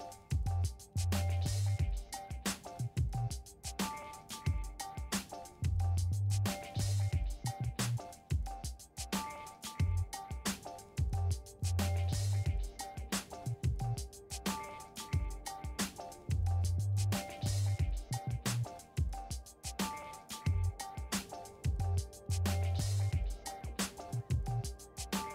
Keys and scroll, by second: 2.2 e, 3.6 1, 4.3 c, 14.6 d, 15.5 2, 16.3 a, 16.8 8, 19.3 6, 24.5 f, 25.1 4.